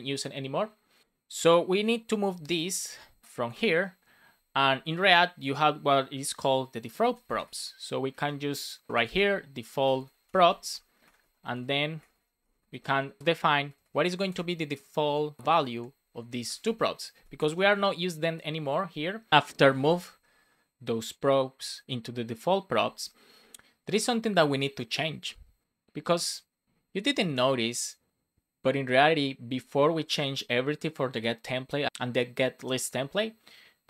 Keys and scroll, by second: 2.3 super+x, 2.7 BackSpace, 3.6 BackSpace, 6.1 Return, 6.6 Return, 7.0 shift+c, 10.1-12.1 typing, 12.4 Return, 12.7 super+v, 13.5 BackSpace, 14.1 shift+;, 14.3 space, 15.0 Down, 15.3 BackSpace, 15.5 shift+;, 15.7 space, 16.1 super+Right, 16.4 BackSpace, 16.6 super+s, 17.4 alt+shift+f, 17.7 super+s.